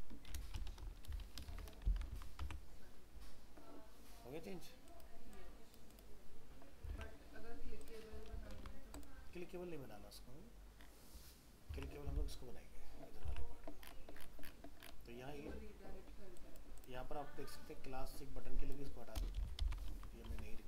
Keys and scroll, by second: 2.4 alt+Tab, 6.9 alt+Tab, 8.3 ctrl+s, 11.7 alt+Tab, 19.9 ctrl+s, 20.3 alt+Tab.